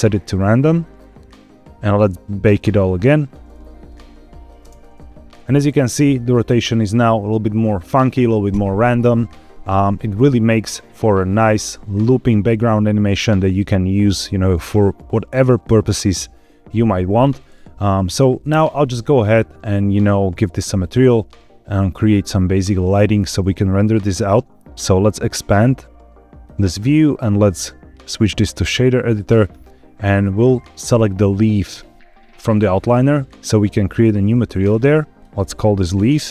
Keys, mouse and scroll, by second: 0.5-1.7 scroll up 4, 2.3 click, 3.8-4.4 drag, 4.6 space, 5.4 click, 5.4 space, 18.4 space, 24.6-26.3 drag, 27.0-28.6 drag, 31.6 click, 34.5 click, 35.2-36.2 drag.